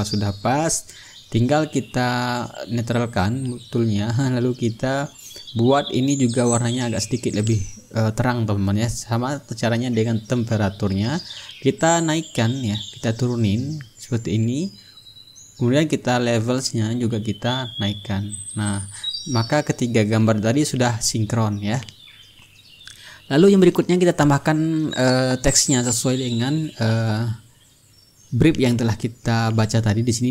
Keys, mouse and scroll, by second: 2.9 click, 3.9-5.4 ctrl+middle drag, 5.6 ctrl+click, 5.7 ctrl+z, 5.8 middle click, 6.3-9.2 drag, 7.7-9.2 middle drag, 9.4 click, 10.2-11.7 drag, 11.7-15.4 drag, 16.3 click, 17.2 click, 18.3 click, 20.2-24.4 drag, 24.7 click, 29.0 click, 30.2 click.